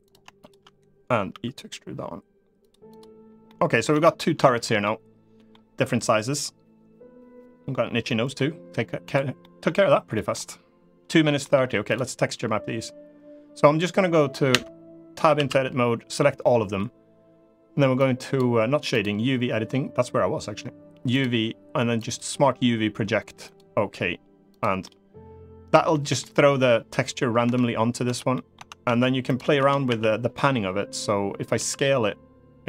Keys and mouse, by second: 1.0 e, 2.3 click, 2.6 click, 3.2 middle click, 3.6 Tab, 4.1 shift+middle drag, 4.5-5.2 middle drag, 7.8 middle drag, 9.1 middle drag, 9.8 middle click, 11.1 middle click, 14.2 Tab, 15.1 a, 18.6 click, 21.0-23.3 drag, 24.2 click, 24.5 middle click, 25.6 middle click, 27.2 Tab, 27.8 Tab, 28.0 middle click, 28.4 Tab, 28.5 a, 29.3 Tab, 29.6 a, 31.3 s.